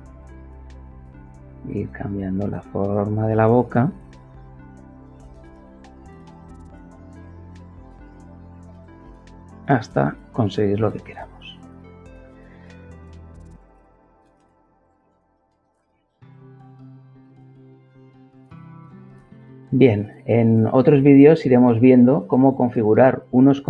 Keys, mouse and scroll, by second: 2.1 click, 3.6 click, 4.4-6.0 drag, 6.7 click, 8.4-9.7 drag, 14.8-16.2 drag.